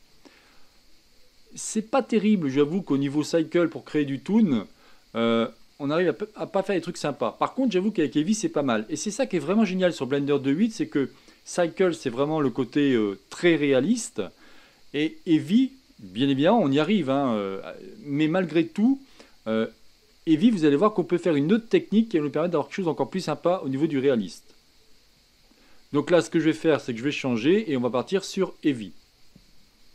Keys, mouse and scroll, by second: 0.2-0.7 scroll down 1, 0.7-3.4 middle drag, 3.4 scroll up 2, 5.0-5.6 scroll down 1, 5.6-8.2 middle drag, 8.2-20.1 scroll down 1, 20.1-22.4 middle drag, 22.4-22.9 scroll down 1, 22.9-24.5 scroll up 2, 24.5-29.7 scroll up 1.